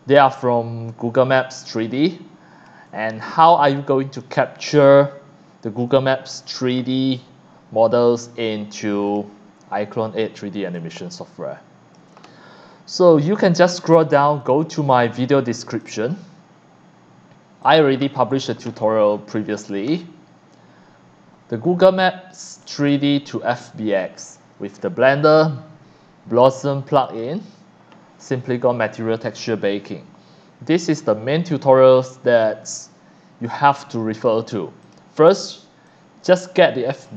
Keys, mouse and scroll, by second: 1.1 ctrl+click, 1.5 ctrl+click, 2.0 ctrl+click, 9.0 click, 10.7 click, 10.7 v, 11.4 click, 14.4 click, 15.8 click, 17.6 click, 18.7-19.6 scroll up 2, 22.6-26.4 drag, 27.0 click, 30.9-34.2 drag, 34.8 click, 35.9-37.0 drag.